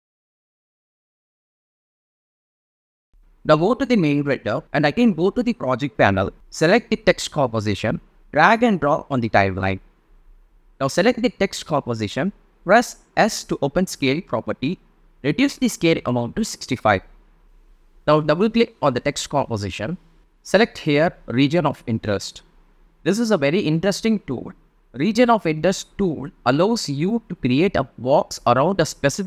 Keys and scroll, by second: 3.2 space, 3.6 super+a, 10.7 v, 12.5 s, 14.0 6, 14.2 5, 14.5 Return.